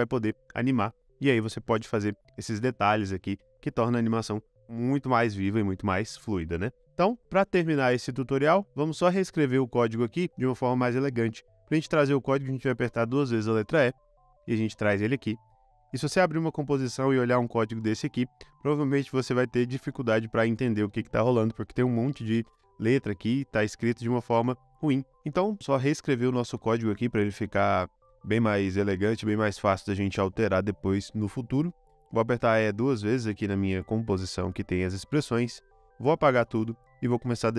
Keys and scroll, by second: 1.6 space, 6.8 space, 13.5 typing, 33.3 typing, 36.8 BackSpace.